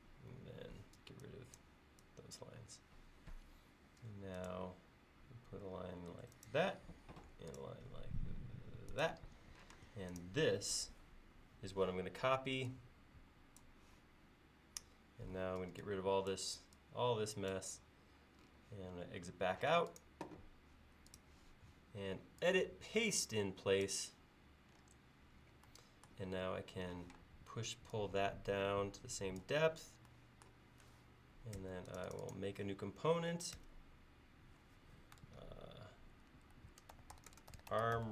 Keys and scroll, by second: 1.0 e, 3.8 l, 7.1 l, 9.8 space, 15.6 e, 19.8 space, 27.1 p, 31.6 space, 33.7 g, 36.4-38.1 typing.